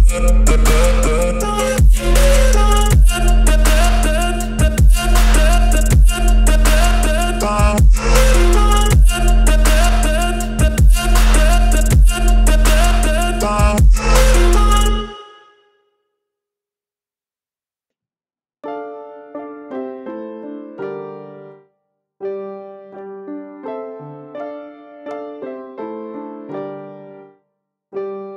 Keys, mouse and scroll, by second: 4.2 5, 6.6 click, 8.3 click, 10.0 click, 11.7 right click, 12.6 click, 14.1 click, 18.5 click, 20.0 g, 22.4 Escape, 23.5 g, 24.3 x, 26.3 click, 27.4-28.3 drag.